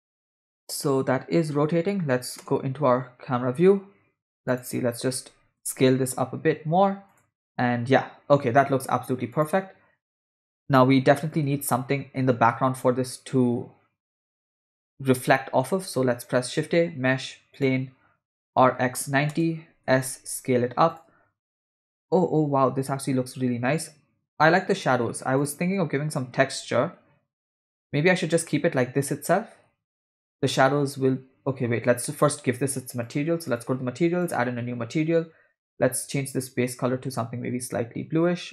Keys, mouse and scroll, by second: 0.3-1.6 middle drag, 2.4 KP_0, 4.0 space, 4.5-4.9 drag, 5.6 s, 7.4 space, 9.3 click, 10.4 space, 11.2 space, 11.4 space, 12.7 space, 14.0 space, 15.8 shift+a, 18.5 r, 19.8 s, 23.5 space, 23.7 space, 24.5 space, 24.7 space, 25.4 click, 26.5 space, 26.9 space, 28.1 space, 29.5 space, 31.1 space, 31.2 space, 33.0 click, 33.5 click, 34.2-34.7 drag, 35.7 click.